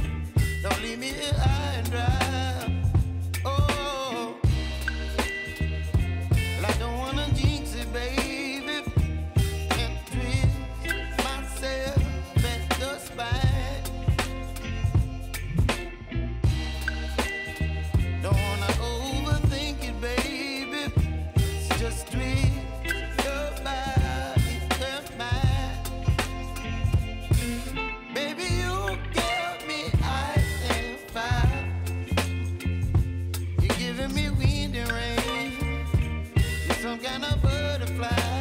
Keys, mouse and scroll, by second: 1.8 scroll up 1, 2.9 click, 3.4 space, 5.9 click, 8.9 ctrl+0, 10.2-11.6 drag, 11.6 s, 12.1-15.7 drag, 15.7 space, 17.6 click, 18.5 ctrl+d, 18.9 s, 19.4-23.2 drag, 23.5 ctrl+a, 23.7-25.1 typing, 25.9 click, 29.1 Return, 29.7 click, 30.6 Return, 31.2 click, 32.4 Return, 33.3-35.8 drag.